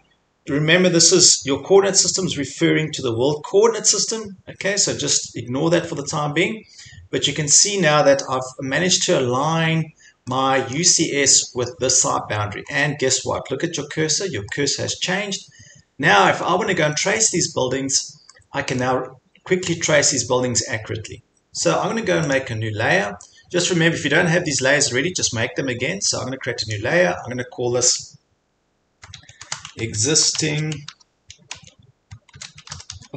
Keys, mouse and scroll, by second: 10.7-11.2 scroll, 12.7 scroll, 14.9 scroll, 15.5 scroll, 16.4 scroll, 17.9 scroll, 18.8-19.3 scroll, 22.4 click, 26.8 click, 29.2-31.9 shift+drag, 29.3-33.1 typing.